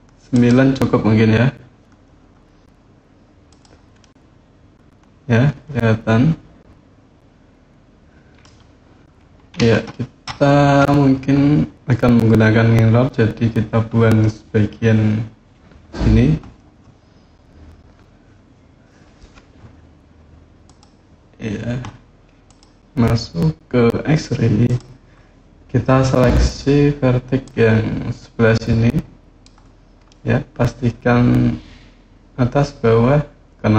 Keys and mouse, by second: 0.1 click, 3.2 click, 3.8-8.2 middle drag, 9.3 KP_7, 20.4 click, 22.2 click, 24.4 click, 27.2-29.2 drag, 29.8-33.7 middle drag.